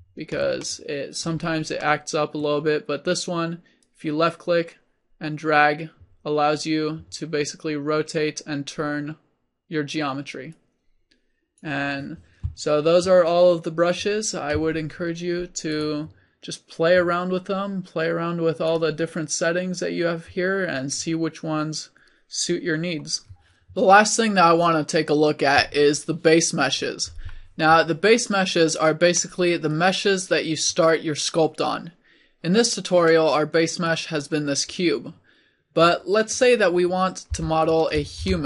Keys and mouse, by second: 5.6-17.7 middle drag, 30.0-33.1 middle drag, 34.6 middle click, 37.4 click, 37.4 x, 38.2 shift+a.